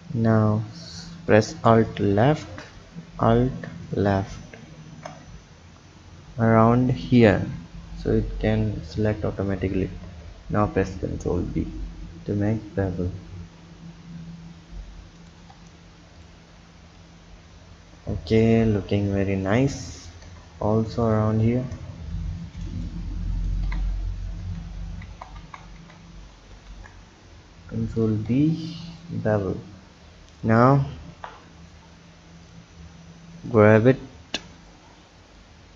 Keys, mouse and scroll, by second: 1.8 alt+shift+click, 3.8 alt+shift+click, 4.9 ctrl+z, 7.1 alt+shift+click, 10.0 ctrl+b, 15.5 Tab, 16.1 click, 17.0 click, 20.0 click, 20.2 Tab, 21.0 alt+click, 22.1 ctrl+b, 23.6 Tab, 24.4 Tab, 25.0 ctrl+z, 25.4 ctrl+z, 25.7 ctrl+z, 26.5 ctrl+b, 28.3 Tab, 28.9 click, 30.3 click, 31.1 KP_1, 32.5-33.6 drag, 35.4 click.